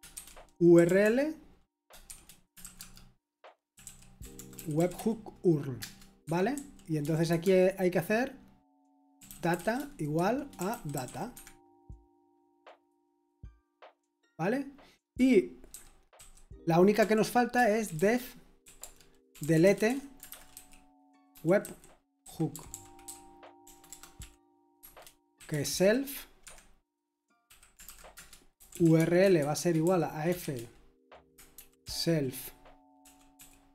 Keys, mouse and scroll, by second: 0.0-7.5 typing, 8.9-11.5 typing, 16.1-33.7 typing, 17.5 Return.